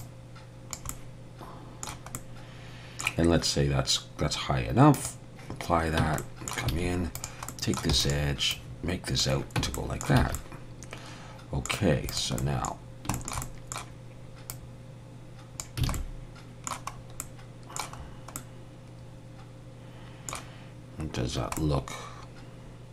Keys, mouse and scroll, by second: 0.0 click, 0.9 middle click, 4.9 click, 6.0 Tab, 6.2 middle click, 6.7 alt+a, 7.1 click, 7.5 middle click, 7.9 e, 8.5 click, 9.6 Tab, 9.7 middle click, 10.2 alt+a, 10.3 middle click, 12.1 click, 12.4 middle click, 12.8 scroll down 1, 13.1 shift+middle click, 13.4 middle click, 14.5 click, 15.9 alt+a, 15.9 middle click, 16.9 scroll up 1, 17.2 middle click, 18.0-18.3 scroll up 3, 18.3 middle click, 21.3 scroll down 1, 21.6 middle click.